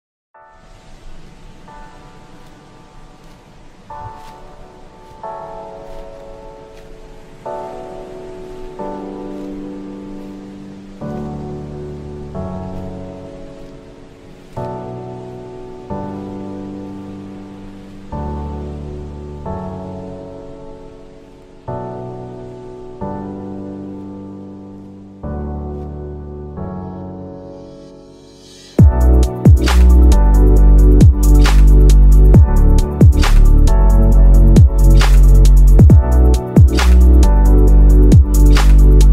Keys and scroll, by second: 9.3 space, 14.9 F2, 22.6 ctrl+g, 23.2 c, 24.1 Escape, 24.9 F2, 31.8 space, 32.4 ctrl+q, 33.1 F9.